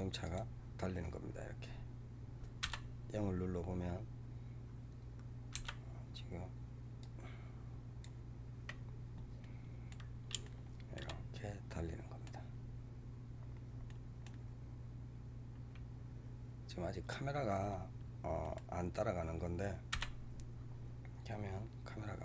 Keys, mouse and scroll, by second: 0.9-1.7 scroll down 12, 2.5 KP_0, 5.5 KP_0, 7.0-9.3 drag, 9.3-12.4 middle drag, 12.4-12.9 scroll up 5, 13.3-13.8 scroll down 3, 13.8-16.8 middle drag, 17.1-17.7 scroll down 8, 18.3 middle click, 18.8 scroll up 2, 19.8 KP_0.